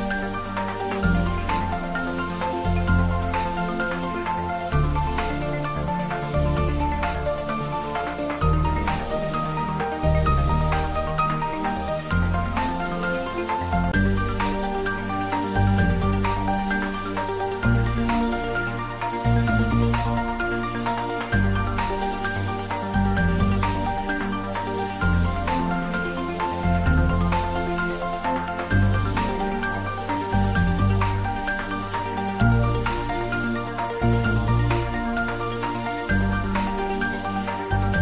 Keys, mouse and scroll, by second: 0.3-0.9 middle drag, 4.9 scroll up 1, 6.8-7.4 drag, 9.7 Tab, 10.1 click, 10.9 scroll up 1, 12.5-13.4 scroll down 1, 13.4 click, 16.3-17.4 scroll up 1, 17.4-18.4 scroll down 1, 18.4-20.5 scroll up 1, 20.5-23.0 middle drag, 23.3 click, 24.3-25.5 scroll down 1, 25.5 click, 26.1 Tab, 26.5 click, 28.4 Tab, 29.0 middle click, 29.1-29.6 middle click, 29.8-30.2 scroll up 1, 30.9 click, 32.2 3, 32.6 click, 34.4 alt+shift+click.